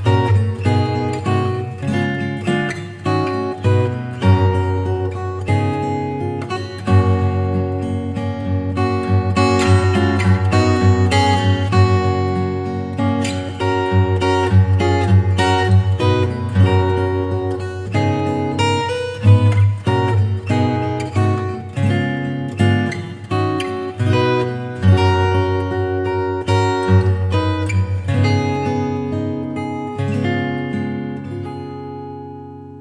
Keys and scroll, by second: 25.8 super+Tab.